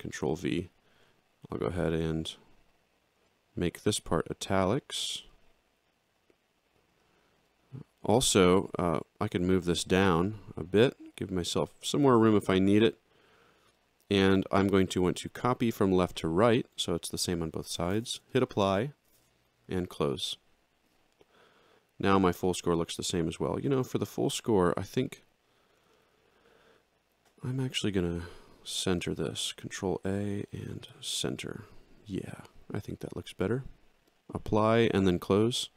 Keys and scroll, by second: 29.0 ctrl+a.